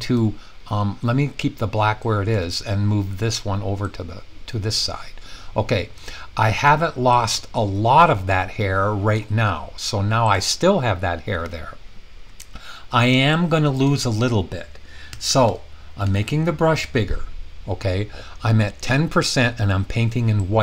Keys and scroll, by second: 15.1-16.0 typing.